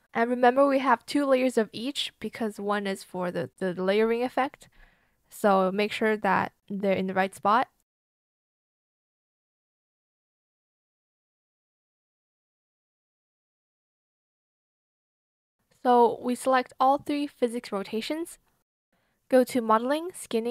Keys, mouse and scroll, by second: 1.4 BackSpace, 1.6 Return, 3.7 ctrl+click, 7.1 ctrl+z, 8.5 ctrl+click, 12.5 ctrl+c, 12.6 ctrl+v, 14.7 BackSpace, 15.5 KP_1, 15.6 Return, 18.6 ctrl+click, 18.9 ctrl+click.